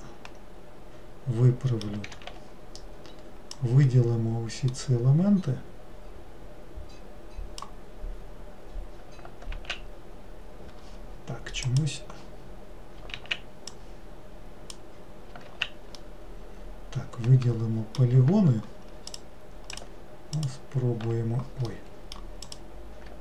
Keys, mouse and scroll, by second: 2.3 alt+z, 3.7 click, 11.8-13.3 drag, 13.3 alt+z, 16.1-19.2 middle drag, 19.3 click, 19.9 click, 20.5 alt+click, 21.9 middle click, 22.6 click.